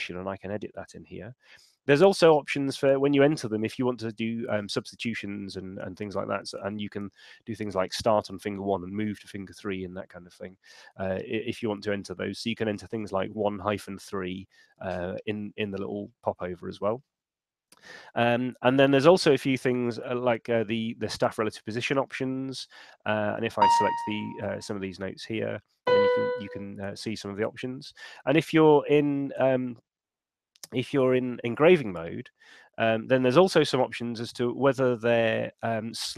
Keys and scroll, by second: 27.7 super+3.